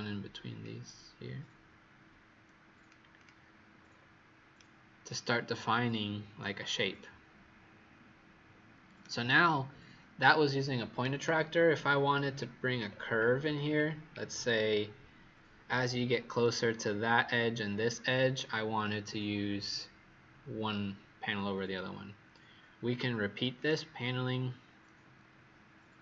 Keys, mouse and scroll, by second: 0.5 click, 3.7-4.5 scroll up 1, 4.5 right click, 4.5-4.9 scroll up 4, 11.0-12.0 scroll down 5, 12.0-12.8 scroll up 4, 12.8-13.5 scroll down 2, 13.5-14.4 scroll down 3, 14.4-16.4 scroll up 2, 23.5 click.